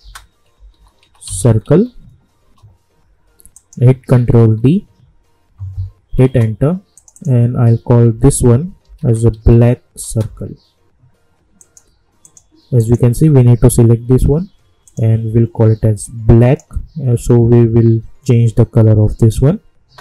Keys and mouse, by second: 0.0-2.1 typing, 2.4 Return, 3.5 click, 4.3 ctrl+d, 6.2 Return, 6.9 click, 8.1-10.1 typing, 11.6-18.8 drag, 19.1 click.